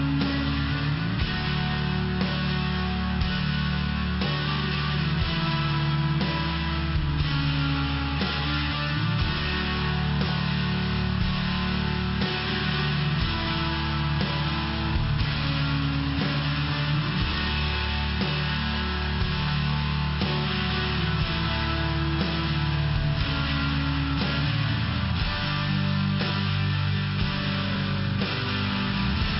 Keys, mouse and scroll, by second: 1.1 click, 1.3 click, 1.4 click, 2.5 click, 3.6 click, 4.6 click, 4.9 click, 5.1 click, 5.7 click, 6.3 click, 6.5 click, 6.8 click, 7.0 click, 7.5 click, 7.6 click, 8.0 click, 8.1 click, 9.1 click, 9.3 click, 9.8 click, 9.9 click, 10.4 click, 10.5 click, 10.9 click, 11.0 click, 11.4 click, 11.5 click, 12.3 click, 12.4 click, 13.0 click, 13.1 click, 13.4 click, 13.5 double click, 13.9 double click, 14.0 double click, 14.5 double click, 14.5 double click, 14.9 click, 15.0 click, 16.7 click, 18.1 click, 18.3 click, 18.4 click, 18.4 click, 18.9 click, 19.0 click, 19.4 click, 19.5 click, 19.9 click, 20.0 click, 20.5 click, 20.6 click, 21.7 click, 21.7 click, 22.2 click, 22.3 click, 23.3 click, 23.4 click, 23.9 click, 24.0 click, 24.4 click, 24.5 click, 25.5 click, 25.7 click, 26.5 click, 28.5 click.